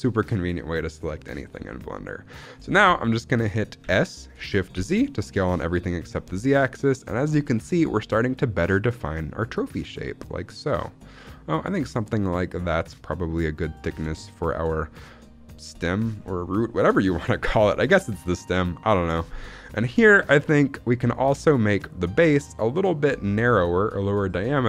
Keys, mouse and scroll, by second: 2.1-2.6 scroll up 1, 2.9 shift+middle click, 3.7 s, 4.6 shift+z, 13.7 click, 14.1 shift+middle click, 16.1 shift+middle click, 17.6 shift+middle click, 18.1-19.0 scroll up 1, 19.0 scroll down 2, 19.2 shift+middle click, 20.0-20.7 scroll up 1, 20.7-21.1 scroll up 1.